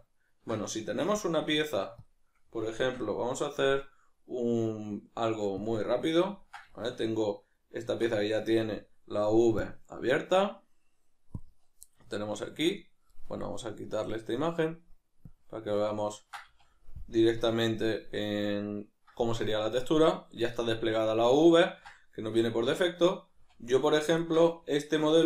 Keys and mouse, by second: 0.0-2.0 ctrl+middle drag, 2.0 click, 2.8 shift+a, 6.1-15.2 ctrl+middle drag, 7.8 Tab, 15.2-16.0 drag, 16.0-25.2 ctrl+middle drag, 16.5 a, 17.2 KP_Decimal, 22.5 Tab.